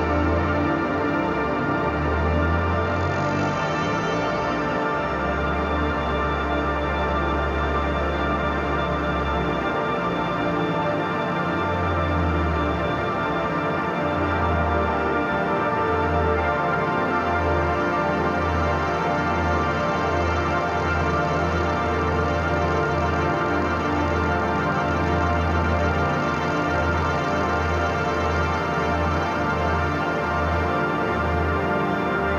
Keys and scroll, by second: 4.9 ], 5.6 [, 6.9 ], 7.0 [, 8.2 ], 8.9 [, 9.8 ], 10.1 [, 11.6-16.4 typing, 24.1 [, 24.7 ], 26.8 [, 27.9 [, 28.9 [, 30.9-32.3 typing.